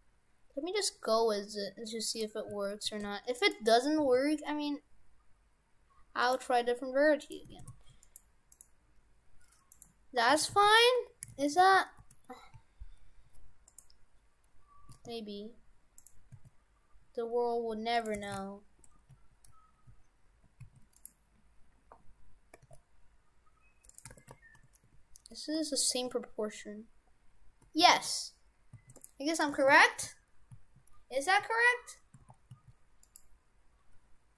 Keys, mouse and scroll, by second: 2.5 s, 4.0 s, 7.3 right click, 7.6 shift+f, 8.6 right click, 9.8 right click, 10.4 shift+f, 11.0 Tab, 11.4 shift+f, 15.0 s, 16.3 s, 18.2 shift+f, 22.5 s, 24.2 shift+f, 29.4 right click, 29.6 shift+f.